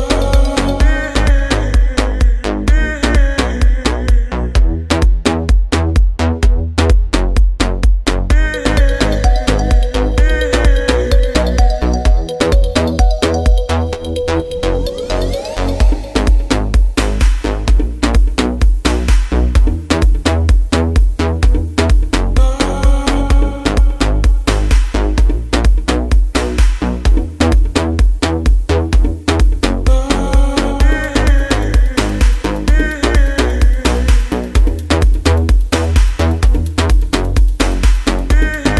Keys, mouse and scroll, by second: 0.8 alt+shift+z, 2.4 shift+z, 4.9 click, 12.2 f, 16.1 shift+f, 18.9 ctrl+f, 20.0 shift+f, 25.6 click.